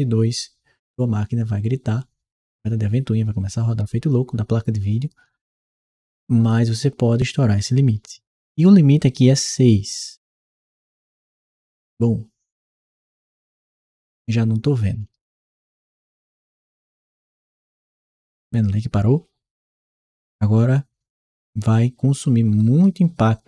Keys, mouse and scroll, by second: 6.3 click, 11.3 Return, 14.0-22.7 right drag, 17.1 s, 18.4 w, 19.4 s, 21.4 w, 22.4 s.